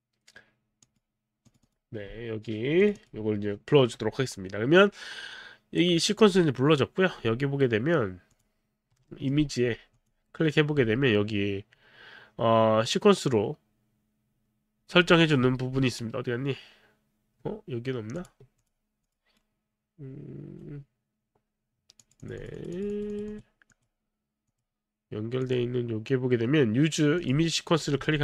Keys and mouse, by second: 0.8 click, 1.5 click, 2.8 click, 3.0 click, 8.3 click, 9.1 alt+middle click, 10.0 click, 18.2 click, 18.6 click, 19.4 right click, 22.0 click, 22.2 click, 24.5 click, 25.4 click, 27.1 click, 28.1 alt+middle click.